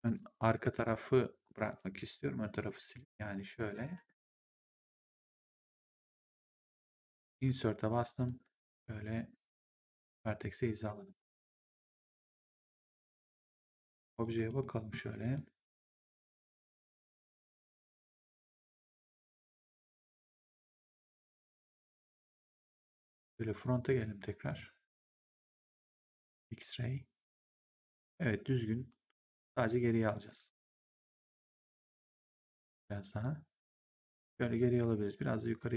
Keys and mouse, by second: 1.6 click, 2.3 shift+click, 3.2 Delete, 3.5 click, 3.9 Delete, 4.5 w, 4.8 right click, 7.4 Insert, 8.0 click, 8.4 v, 9.1 middle click, 10.2 w, 12.1 w, 13.6 click, 14.5 middle click, 17.6 middle click, 19.1 click, 21.8 middle click, 23.8 right click, 24.4 click, 26.2 click, 28.8 g, 29.4 right click, 30.0 click, 31.3 click, 33.1 click, 35.5 click.